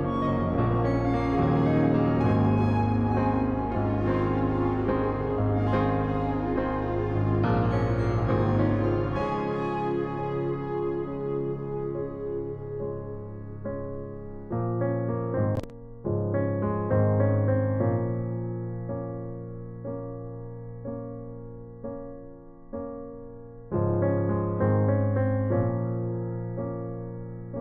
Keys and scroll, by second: 3.9-4.6 typing, 14.4 ].